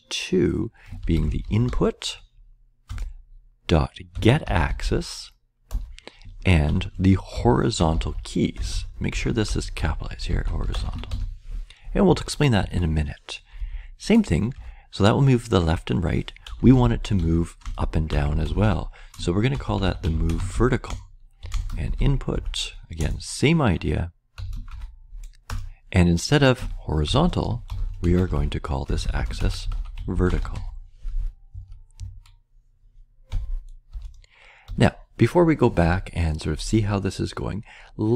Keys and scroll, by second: 0.7-2.1 typing, 2.8 Return, 3.9-5.3 typing, 5.7 Return, 6.4-11.6 typing, 12.0 Right, 12.6 Right, 13.3-14.1 typing, 14.5 Return, 16.1-22.8 typing, 23.0 Return, 24.1-24.8 typing, 25.4 Return, 26.7-31.0 typing, 31.5 Right, 31.9 Right, 33.0-33.7 typing, 33.9 Return, 34.6 Return.